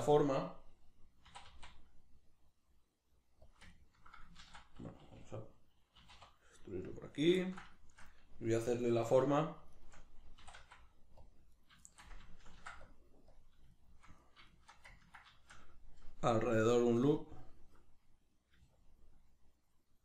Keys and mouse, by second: 1.3 e, 3.5 click, 3.7-7.0 ctrl+middle drag, 4.4 ctrl+z, 7.0 click, 7.4-9.7 ctrl+middle drag, 9.7 shift+right click, 10.4 e, 11.3 click, 11.5 right click, 11.9-13.4 shift+middle drag, 12.5 ctrl+r, 13.4 click, 13.7 shift+right click, 14.2 right click, 14.5 shift+right click, 15.0-18.7 ctrl+middle drag, 18.7-20.0 ctrl+drag.